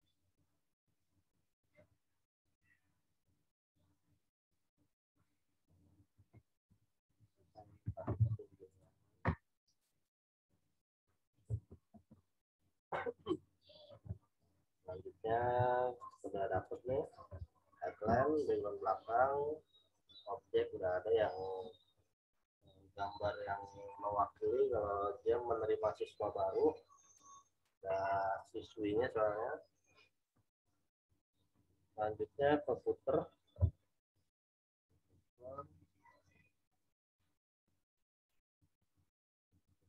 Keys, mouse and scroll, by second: 1.7 v, 3.2 click, 6.1 v, 6.6 Down, 7.0 Right, 8.1 m, 8.6 click, 15.4 z, 16.0 click.